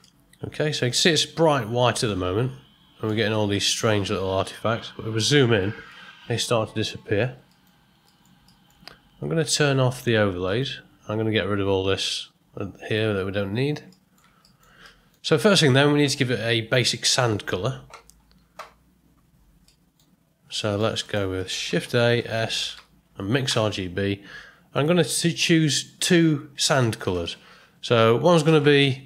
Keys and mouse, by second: 0.0 middle click, 1.1-3.0 ctrl+middle drag, 4.4-5.6 ctrl+middle drag, 5.9-7.2 middle drag, 7.5 ctrl+middle click, 8.1 ctrl+middle click, 8.4 shift+middle click, 10.4 click, 12.8 click, 13.9 ctrl+middle click, 14.4 shift+middle click, 14.8 middle click, 19.7 middle click, 20.6 middle click, 21.8 shift+a.